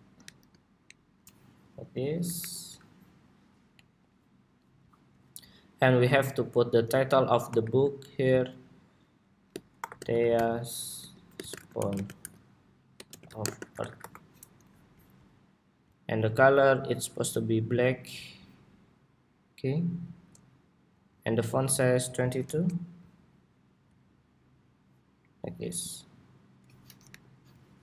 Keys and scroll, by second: 0.6 alt+Up, 2.1 alt+Up, 14.2 Escape, 26.8 alt+Up.